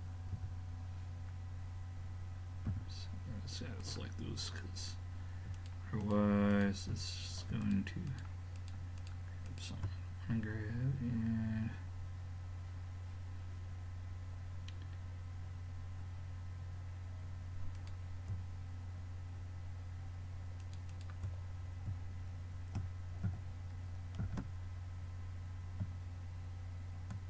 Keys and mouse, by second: 0.4 a, 2.7 a, 3.8-11.3 drag, 11.5-15.4 middle drag, 17.8-19.6 drag, 20.6-22.7 drag, 24.3 shift+d.